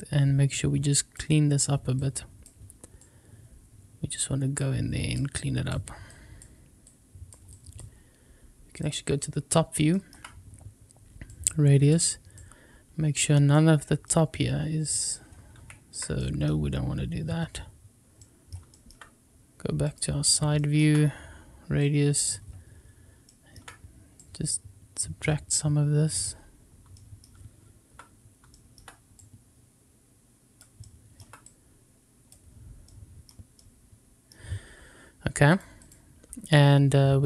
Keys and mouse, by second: 2.0 click, 3.0-4.1 drag, 4.5 click, 5.3 click, 6.0 click, 6.8 click, 7.5 click, 9.8 shift+middle click, 11.3 click, 12.4-13.5 drag, 14.0 middle click, 15.5 ctrl+z, 18.1 middle click, 18.6 shift+middle click, 19.8 click, 21.7 click, 24.2-26.2 drag, 28.4 shift+middle click, 29.2-30.5 drag, 31.1 shift+middle click, 31.4 click, 33.2-34.2 middle drag, 35.4 click.